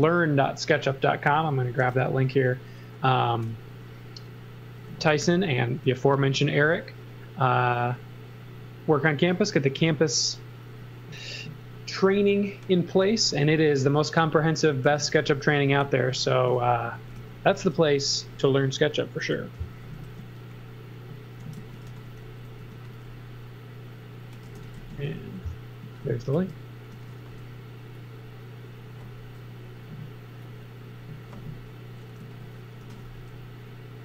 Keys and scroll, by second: 3.3 space, 5.2 g, 13.8-15.8 typing, 16.9 x, 17.1 v, 17.6 space, 19.4 z, 19.9 space, 21.6 z, 21.9 x, 22.6 m, 24.4 space, 24.7 x, 25.8 z, 26.3 space, 26.9 x, 27.2 space, 28.3 space, 32.2 z, 32.8 x, 33.1 space.